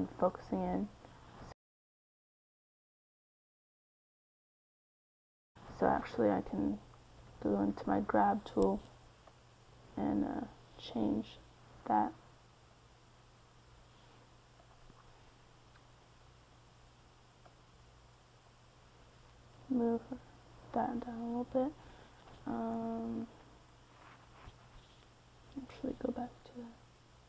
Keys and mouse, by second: 4.8 KP_3, 6.1 g, 6.3 f, 13.6 middle click, 15.6 f, 15.7 middle click, 22.2 c, 22.5 middle click, 23.8 KP_1, 24.9 g.